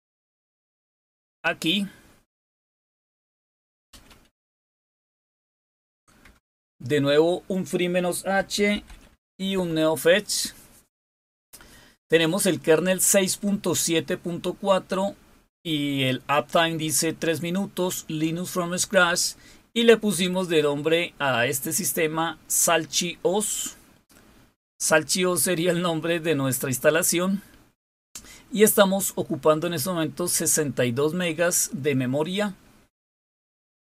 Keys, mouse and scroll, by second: 0.5 click.